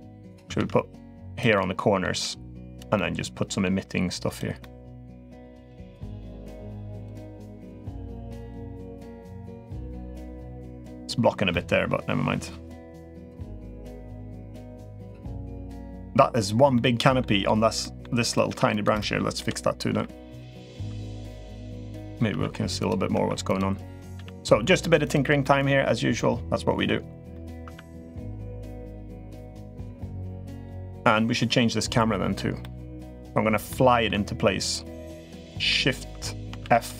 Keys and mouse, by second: 0.4 shift+d, 1.3-1.8 drag, 1.9 g, 2.7-3.4 middle drag, 4.4 middle click, 4.7 g, 5.5-5.9 middle drag, 6.1 g, 7.1-7.5 middle drag, 8.5-9.0 middle drag, 11.3-12.6 middle drag, 13.0-13.3 middle drag, 13.7-14.0 middle drag, 14.6-15.6 middle drag, 16.5-17.0 middle drag, 17.6 middle drag, 18.2 Tab, 18.5 click, 19.1-23.9 typing, 23.2 click, 25.2-26.6 middle drag, 27.1 middle click, 27.4 Tab, 28.3-28.9 middle drag, 32.4-32.8 middle drag, 33.4-33.8 middle drag, 36.4 shift+f.